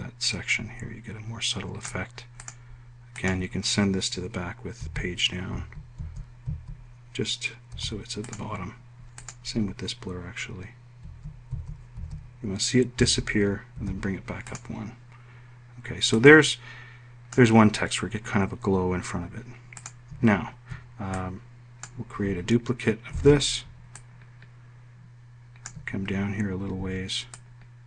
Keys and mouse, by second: 6.3 Page_Down, 6.7 Page_Down, 7.2 Page_Down, 8.5 Page_Up, 11.7 Page_Down, 12.2 Page_Down, 12.7 Page_Down, 13.7 Page_Down, 14.5 Page_Up, 24.1 d.